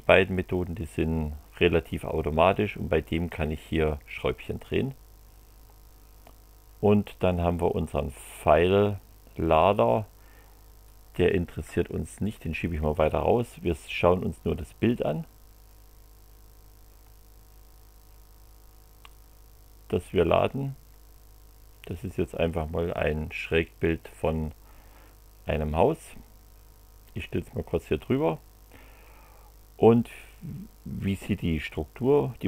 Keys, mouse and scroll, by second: 6.2-9.1 drag, 10.8-12.7 drag, 13.7 click, 19.1-21.1 drag, 21.8-28.2 drag, 32.1 click.